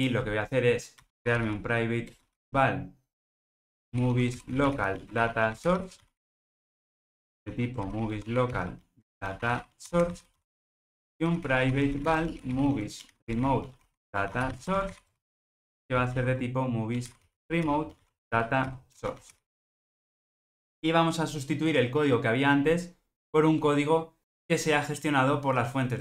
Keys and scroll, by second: 2.1 Return.